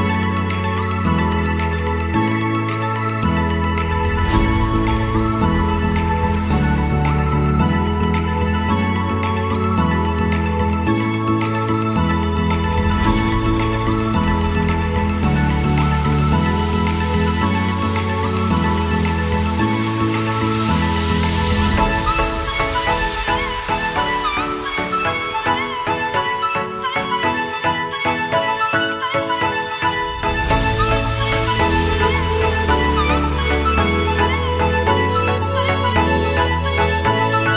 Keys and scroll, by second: 12.7 c, 28.1 c, 30.1 Escape, 32.9 a, 33.1 r, 33.5 space, 33.8 a, 36.7 a.